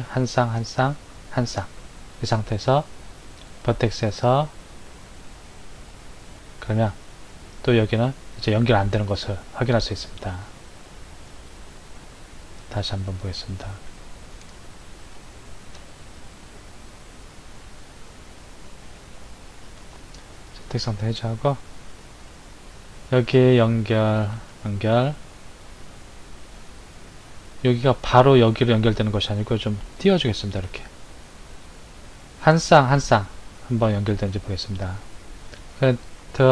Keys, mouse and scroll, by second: 3.4-6.6 drag, 10.9 shift+click, 12.6 click, 14.5 ctrl+z, 15.2 ctrl+z, 15.8 ctrl+z, 19.0 ctrl+z, 20.3 click, 23.5 click, 24.4 shift+click, 26.5 shift+click, 29.8 shift+click, 34.4-36.5 drag.